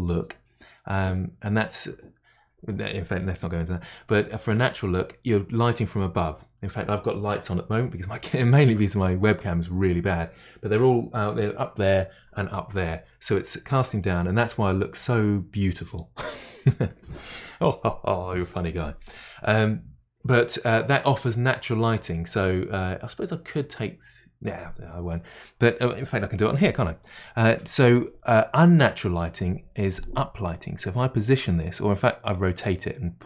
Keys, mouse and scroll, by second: 30.4 click, 30.8-32.3 middle drag, 32.3-33.2 drag.